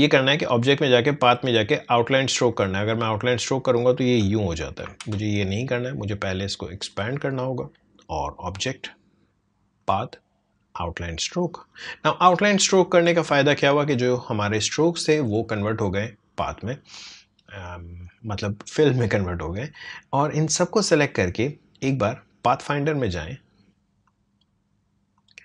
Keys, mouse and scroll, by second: 0.0 click, 4.8 ctrl+z, 6.9-14.3 drag, 19.7-25.2 drag.